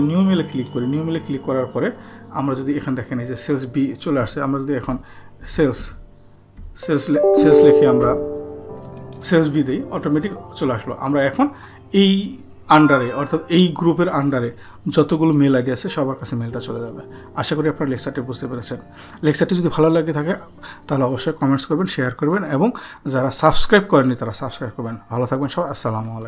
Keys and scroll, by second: 5.4-5.8 typing.